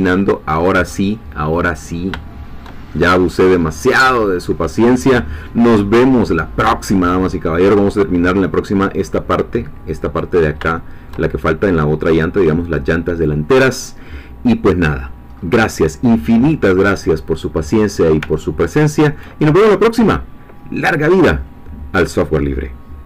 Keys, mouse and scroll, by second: 0.6 click, 1.0-2.6 middle drag, 2.6 shift+scroll up 2, 2.8-3.1 shift+scroll down 2, 3.1-4.5 middle drag, 4.5-4.9 scroll down 2, 4.9-6.4 middle drag, 6.4-6.7 scroll up 1, 6.8-7.9 shift+middle drag, 10.6 shift+middle click, 13.3-13.6 scroll down 1, 13.6-15.4 middle drag, 15.4-15.8 scroll up 1, 16.4-17.0 scroll up 1, 17.0-17.4 scroll down 1, 18.4-19.7 ctrl+middle drag.